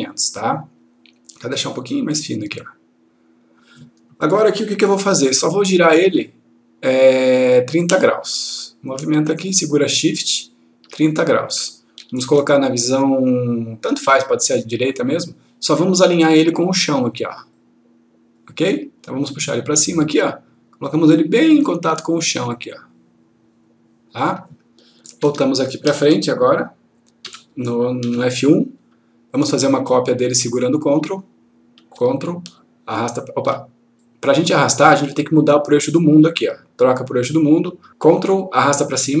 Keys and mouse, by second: 2.1-3.6 click, 5.8 click, 8.2-10.9 click, 15.1 click, 17.5-18.4 click, 25.2 Caps_Lock, 27.2 1, 29.7-30.3 click, 32.5-33.4 ctrl+click, 36.8 click, 38.4-39.2 ctrl+click.